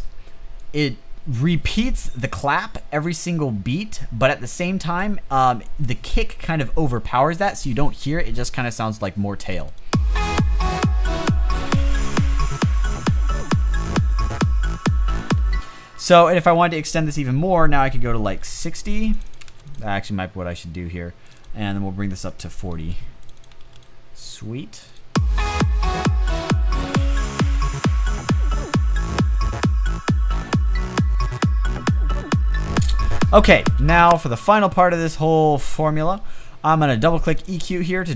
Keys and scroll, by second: 15.0 space, 17.8-19.6 typing, 22.1-23.2 typing, 33.5 space.